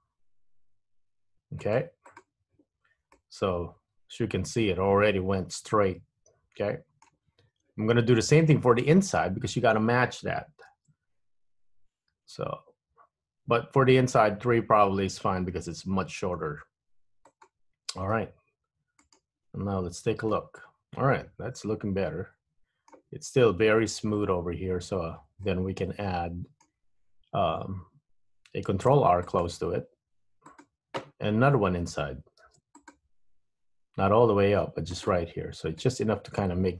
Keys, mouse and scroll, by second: 3.3 middle click, 10.9 ctrl+r, 20.0 Tab, 20.4 middle click, 24.6 Tab, 25.6 middle click, 27.0-28.0 scroll up 1, 28.9 ctrl+r, 32.5 ctrl+r, 35.5 Tab, 35.9 middle click.